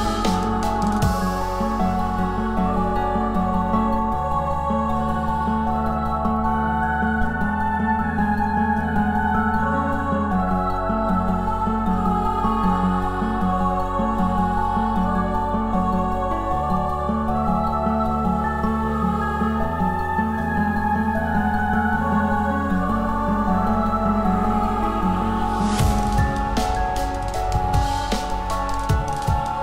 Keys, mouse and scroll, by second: 21.7 f.